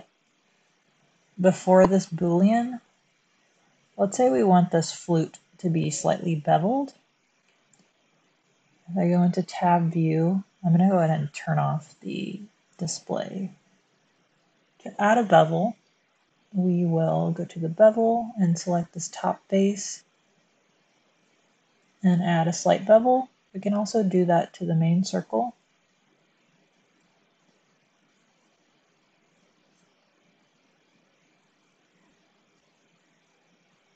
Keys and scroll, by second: 0.1 super+z, 7.2 Tab, 25.4 Tab, 28.3 Tab.